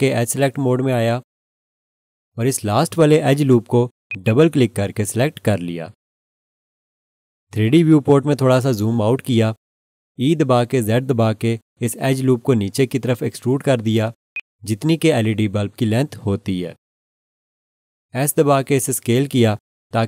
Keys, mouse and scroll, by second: 0.9 2, 4.1 click, 4.2 double click, 7.9 scroll down 1, 10.9 e, 11.4 z, 14.3 click, 18.5 s.